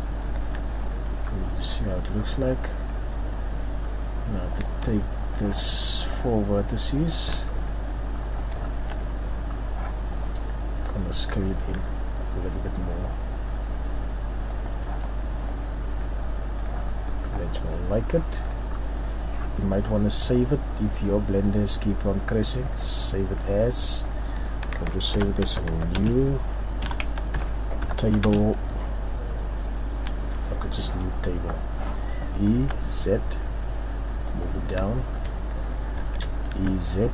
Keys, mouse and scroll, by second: 0.3 Tab, 0.7 middle click, 0.7-1.1 scroll down 1, 1.1 z, 1.3-1.9 scroll up 2, 1.7 middle click, 2.2 scroll down 2, 2.5 middle click, 3.1 Tab, 3.8 scroll up 1, 5.2 shift+right click, 6.5 shift+right click, 7.3-7.7 scroll down 4, 7.7 middle click, 8.0-9.3 scroll up 6, 8.9 middle click, 9.5 scroll up 1, 14.7 click, 14.8 Tab, 15.2-15.7 scroll down 3, 15.5 middle click, 16.8 middle click, 17.3-17.7 scroll up 2, 18.3 middle click, 18.3-18.7 scroll down 4, 18.7 scroll up 1, 19.7-20.1 scroll up 1, 20.2 click, 34.4 click, 34.9-35.4 shift+scroll down 2, 36.0 e.